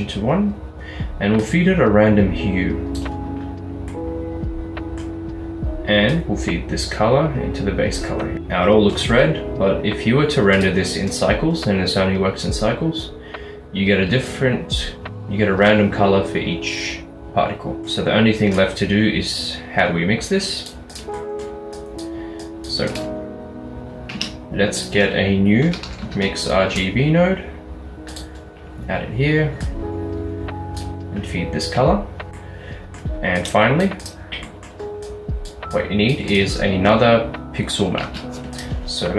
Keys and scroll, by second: 24.2 a, 25.7-26.5 typing, 26.9 Return, 28.5-29.2 typing, 38.1 a.